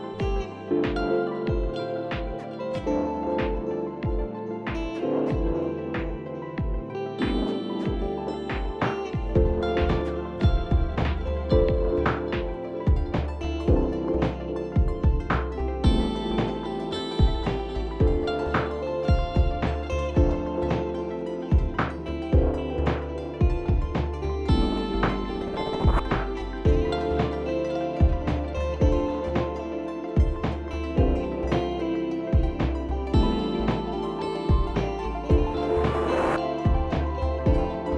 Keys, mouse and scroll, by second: 0.3 click, 2.1 click, 6.6 click, 8.2 click, 14.3 click, 21.6 click, 27.0 click, 32.3 click, 35.5-35.9 alt+scroll, 36.8 click, 36.8-37.3 alt+scroll.